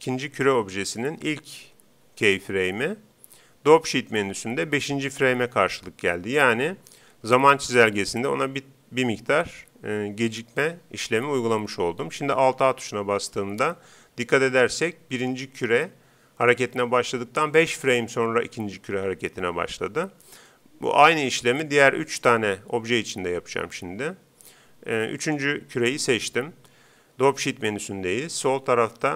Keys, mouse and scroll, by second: 12.6 alt+a, 23.9 Escape, 25.2-26.9 right drag.